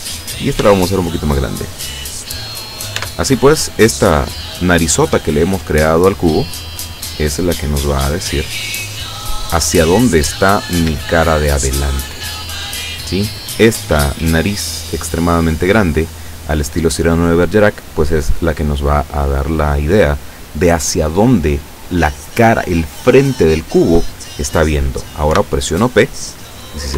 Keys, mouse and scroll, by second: 0.7 s, 2.1 click, 3.0 Tab, 7.6 middle click, 8.9-10.3 middle drag, 10.5 scroll up 1, 11.0-12.6 shift+middle drag, 25.4 p.